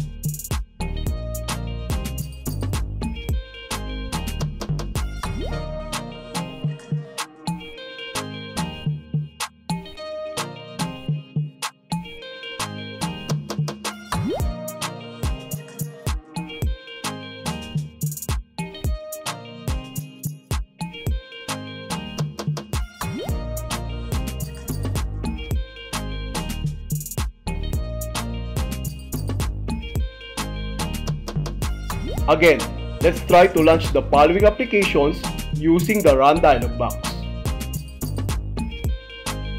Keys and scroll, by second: 0.1 Left, 1.1 Left, 2.1 Left, 3.1 BackSpace, 4.2 BackSpace, 5.2 Left, 7.2 alt+F4, 9.2 super+x, 10.5 u, 12.5 i, 16.6 space, 22.6 Return, 38.3 super+r.